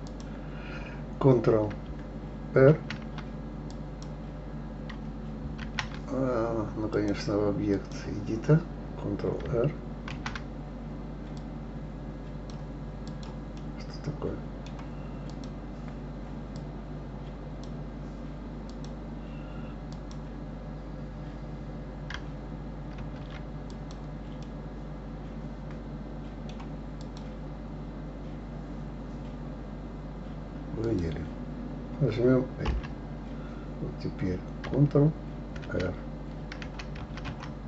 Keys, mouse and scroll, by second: 0.1 click, 2.7 ctrl+r, 3.7 click, 5.6 ctrl+r, 6.9-10.0 drag, 10.1 ctrl+r, 13.1 click, 13.6-15.3 middle drag, 15.3 click, 16.6-18.8 drag, 19.9 click, 23.1 ctrl+r, 24.5-27.0 middle drag, 27.0 click, 30.8 click, 32.7 l, 35.9 ctrl+r.